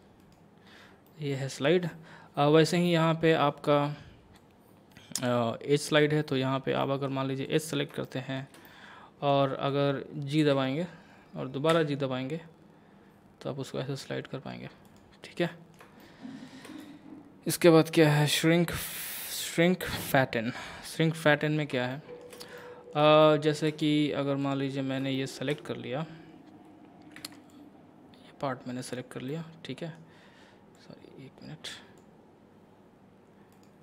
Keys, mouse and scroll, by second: 0.2 right click, 1.1-2.7 middle drag, 2.7-4.4 scroll down 1, 4.4-6.8 drag, 6.8 middle click, 7.5 click, 8.1-10.4 shift+middle drag, 10.4 g, 14.9 right click, 15.5-19.3 middle drag, 19.6-21.4 drag, 21.4 scroll down 1, 21.9 shift+middle click, 22.6-24.4 middle drag, 24.4 click, 24.8 scroll up 1, 25.2 shift+middle click, 27.2 c, 27.5-29.3 drag, 29.3-30.8 middle drag, 30.8-33.5 drag, 33.5 right click.